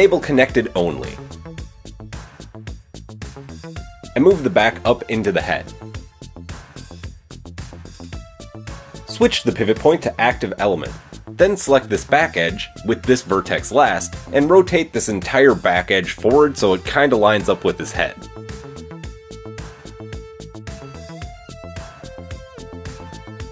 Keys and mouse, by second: 0.2-2.9 drag, 2.9-8.7 middle drag, 3.6 g, 9.0 middle click, 9.1-13.7 drag, 11.8 shift+middle click, 11.8 shift+right click, 12.2 shift+middle click, 12.2 shift+right click, 13.7-14.9 middle drag, 14.9 click, 15.2-20.8 middle drag, 17.1 r, 22.8 click.